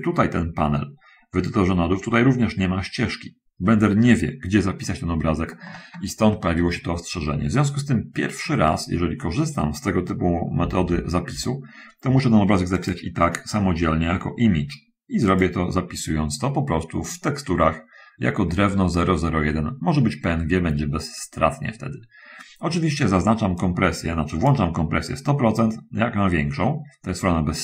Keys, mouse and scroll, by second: 10.9 shift+F10, 11.4-11.8 scroll up 2, 12.5 click, 15.5 click, 23.9 click.